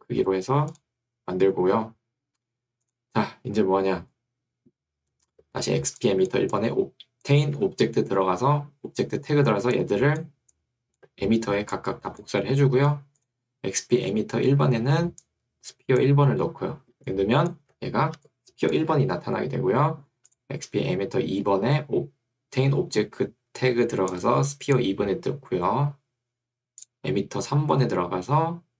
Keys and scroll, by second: 0.0 6, 7.6 Escape, 12.6 Escape, 17.8 Escape, 18.2 2, 19.0 Escape.